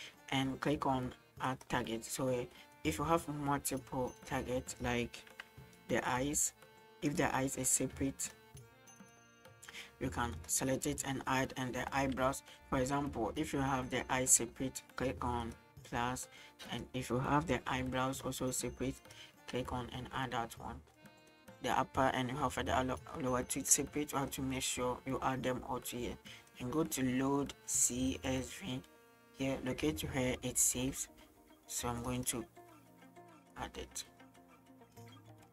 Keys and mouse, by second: 1.6 click, 2.5-4.9 middle drag, 5.5 g, 7.1 click, 7.9 g, 9.0 right click, 9.4 h, 10.4-12.4 right drag, 12.6 g, 13.9 right click, 15.5 click, 16.7 right click, 17.7 g, 19.0 click, 20.9-21.3 middle drag, 23.7-24.3 middle drag, 26.4 middle click, 28.3 click.